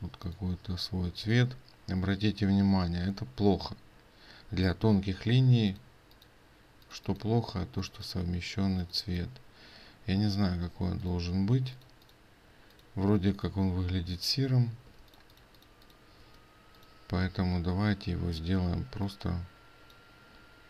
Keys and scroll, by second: 10.9 ctrl+space.